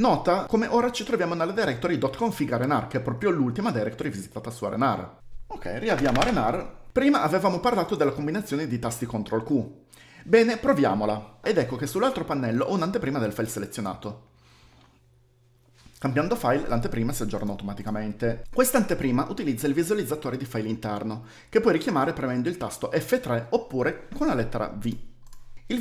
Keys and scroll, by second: 5.6-6.4 typing, 11.6 ctrl+q, 17.9 j, 24.4 typing.